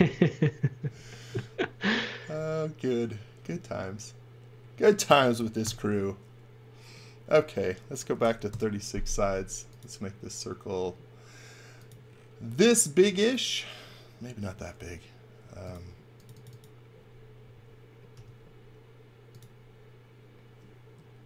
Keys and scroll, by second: 5.6 i, 7.8-8.8 typing, 14.4 super+z, 15.5 space, 18.1 i.